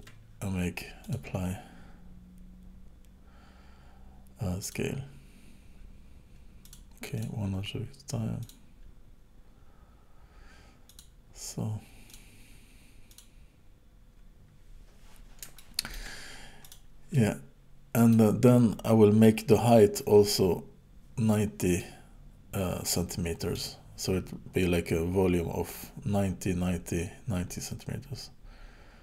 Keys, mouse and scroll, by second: 1.0 click, 6.6 click, 7.2 click, 8.4 click, 12.1 click, 13.1 click, 15.6 shift+middle click, 16.6 click, 17.1 middle click, 21.8 middle click.